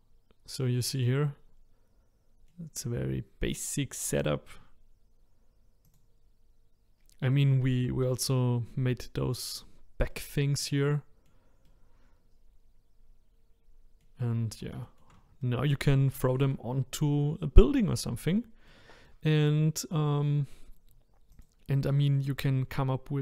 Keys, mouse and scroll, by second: 5.9 click, 7.3-14.4 middle drag, 14.4-14.8 scroll down 2, 14.8-16.8 shift+middle drag, 16.8-17.4 scroll up 2, 17.4-17.8 scroll down 1, 17.8-21.4 middle drag, 21.4 click, 22.0 shift+middle click, 22.7-23.2 scroll up 1.